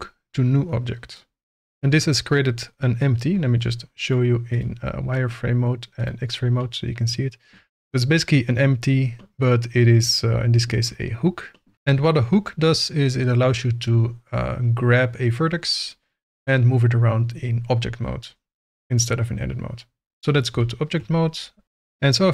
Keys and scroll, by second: 20.1 Tab.